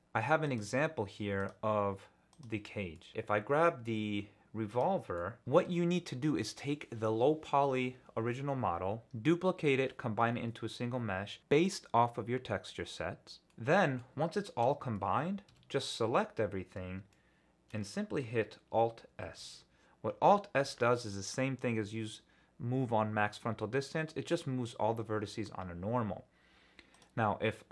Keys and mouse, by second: 0.4 click, 1.4 click, 2.3 click, 2.9 middle drag, 5.2 middle drag, 13.5 middle click, 14.7 Tab, 15.5 a, 17.1 shift+click, 19.2 alt+s, 26.9-27.7 drag.